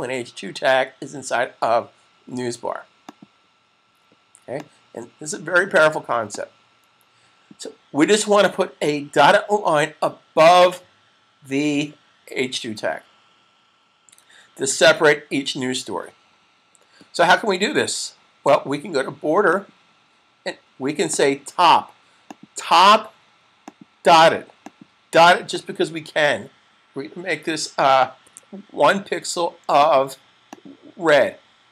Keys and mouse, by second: 3.2 click, 19.2 click, 28.0 1, 29.6 click.